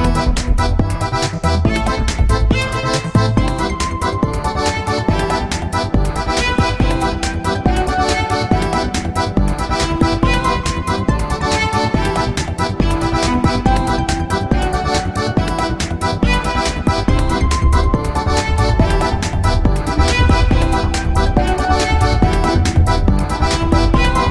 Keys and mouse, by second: 0.1 ctrl+a, 4.6 click, 5.2 middle click, 5.5 click, 5.9-7.5 middle drag, 7.5-10.1 right drag, 10.3 click, 10.9-12.5 middle drag, 12.8-15.7 middle drag, 13.9 KP_1, 15.7-19.8 drag, 16.7 right click, 18.0 right click, 19.0-20.8 right drag, 20.4-22.3 drag, 20.9 z, 21.3-23.3 middle drag, 23.3-24.3 drag.